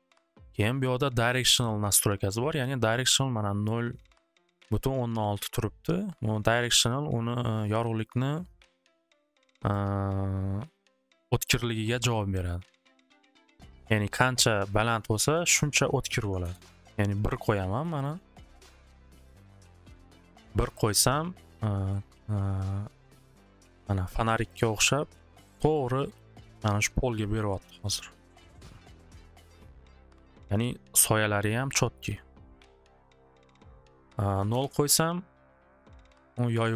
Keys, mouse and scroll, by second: 5.1 click, 6.9-8.9 drag, 8.9 click, 9.9 click, 11.3-13.5 drag, 14.7 click, 14.9 click, 16.2 1, 16.4 Return, 17.8 click, 18.8 click, 22.2 scroll, 24.0 middle click, 24.4 middle click, 24.7 middle click, 25.8 middle click, 26.2 middle click, 27.6 middle click, 28.0 middle click, 28.9 scroll, 29.9 scroll, 30.6 middle click, 33.7 click, 33.8 click, 34.2 0, 34.5 Return.